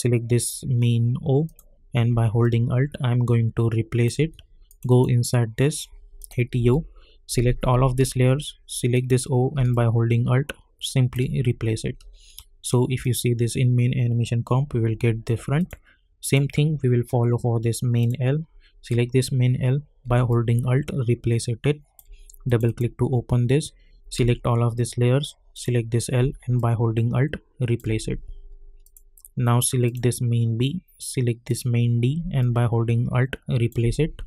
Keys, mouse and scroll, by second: 1.4 click, 2.4-4.7 alt+drag, 6.5 u, 7.2-8.9 drag, 9.7-13.0 alt+drag, 15.5 click, 20.3-22.5 alt+drag, 24.1 ctrl+a, 25.5 click, 26.5-28.8 alt+drag, 32.4-34.2 alt+drag.